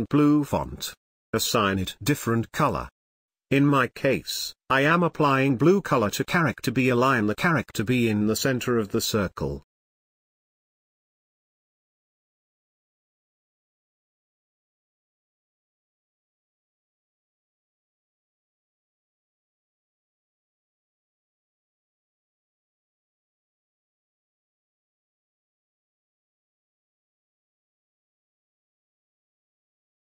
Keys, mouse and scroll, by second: 2.7 click, 2.8 click, 4.5 click, 7.3 click, 15.7 click, 15.7 click, 17.2 shift+click, 18.7 click, 20.7 ctrl+space, 20.9-30.1 ctrl+drag.